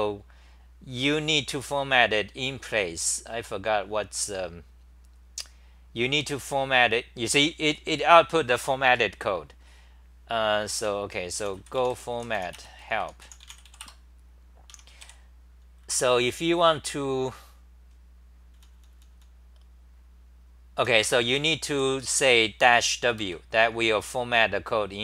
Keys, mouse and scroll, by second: 4.7-7.6 scroll up 18, 10.6-11.9 typing, 13.8 Return, 14.7 Home, 15.0 3, 15.8-16.2 c, 18.5 t, 18.7 t, 18.9 t, 19.1 t, 20.5-23.9 typing, 23.2 ctrl+g.